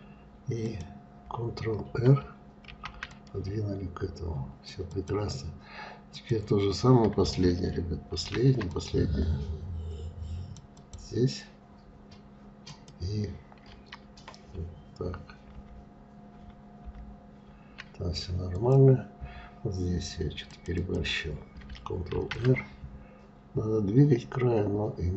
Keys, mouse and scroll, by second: 0.2 click, 2.2 ctrl+r, 5.7 click, 7.7 ctrl+r, 12.3 click, 15.1 ctrl+z, 15.9 ctrl+z, 18.1 click, 20.0 click, 20.4 click, 21.7 ctrl+r.